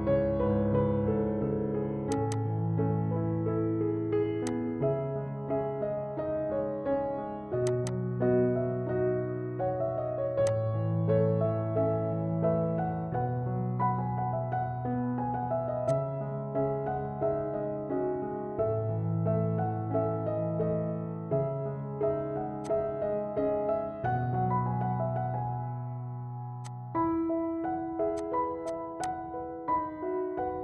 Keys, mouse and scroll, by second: 2.3 click, 6.7 typing, 7.8 click, 10.0-10.6 typing, 10.6 click, 12.6 typing, 15.8-17.2 drag, 16.0 typing, 17.3 click, 18.9 Tab, 19.9 Tab, 22.6 click, 23.2 Tab, 24.4 Tab, 25.9 Tab, 26.6 click, 28.2-30.6 drag.